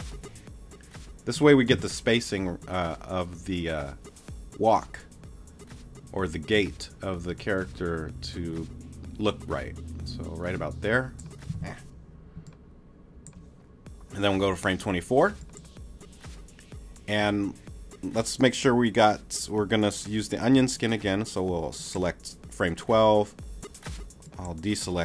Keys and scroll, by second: 2.4 super+z, 11.5 shift+super+z, 12.3 super+z.